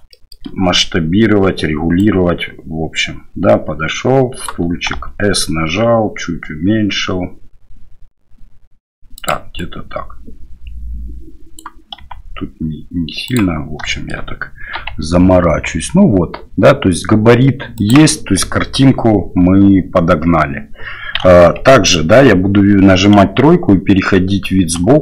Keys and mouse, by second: 0.1 shift+middle click, 2.0-4.5 right drag, 4.9 s, 9.6-11.6 right drag, 12.0 s, 13.9 shift+drag, 14.8 g, 21.2 KP_3, 23.2 KP_1, 24.8 KP_3.